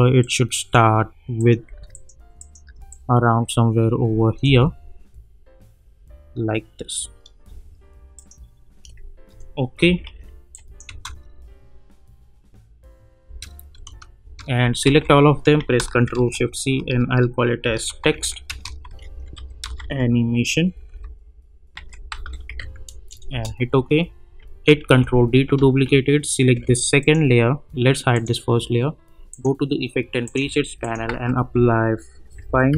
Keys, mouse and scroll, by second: 0.8-1.3 drag, 2.9-4.4 click, 4.4 space, 7.4 space, 8.1 click, 9.8 -, 10.0 -, 10.5 click, 10.8 space, 13.2 space, 14.8 ctrl+a, 16.1 ctrl+shift+c, 17.4-20.3 typing, 21.5-23.0 typing, 23.3 Return, 24.8 ctrl+d, 27.0 click, 30.8 click, 31.0 ctrl+a, 32.1-32.7 typing.